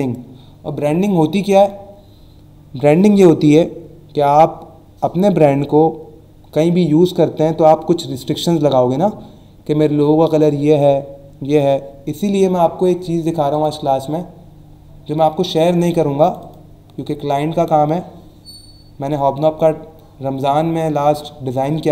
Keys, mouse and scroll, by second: 13.5 click, 16.2 click.